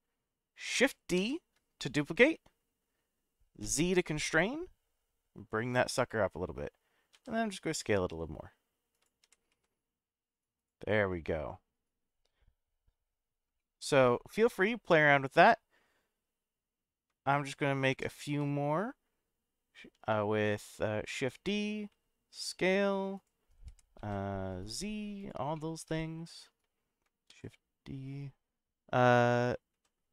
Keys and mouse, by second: 1.2 shift+d, 3.6 z, 6.0 click, 7.1 s, 8.9 click, 9.2 g, 9.5 z, 10.6-10.9 drag, 10.9-13.1 middle drag, 13.6-14.0 shift+middle drag, 17.9 shift+d, 18.3 z, 21.3 click, 21.9 s, 23.1 click, 23.7 g, 24.0 z, 25.2 click, 25.6-26.6 middle drag, 27.3 shift+d, 29.7 z.